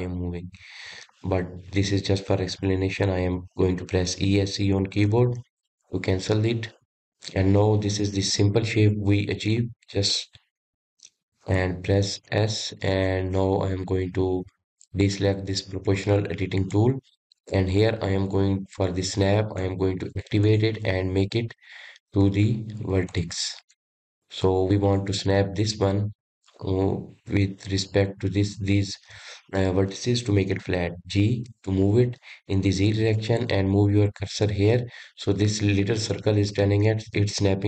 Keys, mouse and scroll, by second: 6.3-8.9 middle drag, 8.9 KP_1, 10.1 middle click, 11.0 scroll up 1, 12.7 Escape, 17.2 click, 20.2 click, 21.0-24.2 drag, 24.3 click, 25.5 click, 31.9 g.